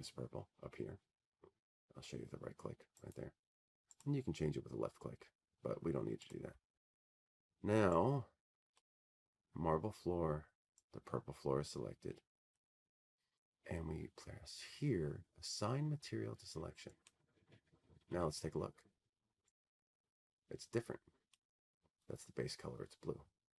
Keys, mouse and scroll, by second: 0.9 click, 2.7 click, 8.7 right click, 12.0 right click, 14.4 right click, 18.0-20.4 drag, 22.7-23.5 drag.